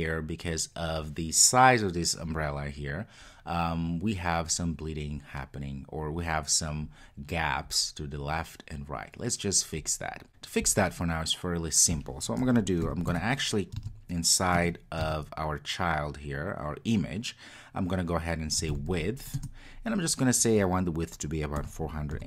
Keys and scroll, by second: 19.4 Return.